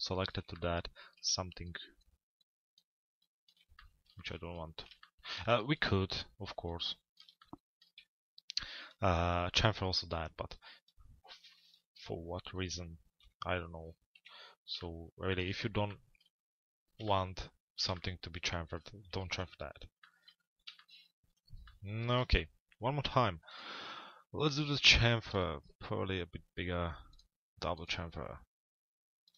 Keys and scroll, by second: 12.9 p, 14.1 z.